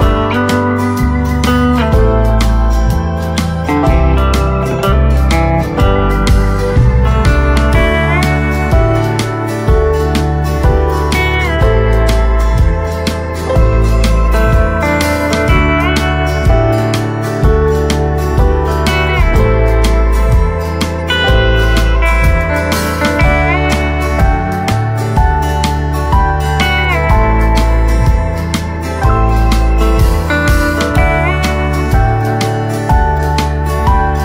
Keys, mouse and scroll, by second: 5.2 typing, 9.2 typing, 9.3 click, 9.7-10.0 scroll down 2, 11.2 click, 11.7 right click, 12.3 scroll up 1, 15.1-19.1 drag, 19.1 right click, 20.5 click, 20.9-21.3 scroll down 1, 21.3 right click, 21.9 right click, 21.9 scroll down 1, 22.3-24.7 right drag, 24.7-25.0 scroll up 1, 25.0 right click, 26.1 scroll up 1, 28.3-33.8 right drag, 33.8 click.